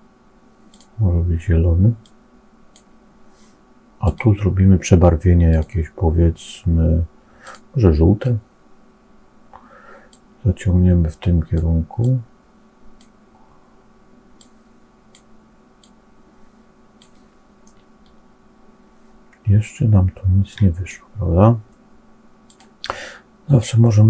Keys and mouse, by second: 3.9 click, 10.0-11.5 drag, 12.0 click, 14.3 click, 15.8-17.0 drag, 17.6-20.5 middle drag, 22.4-24.0 drag.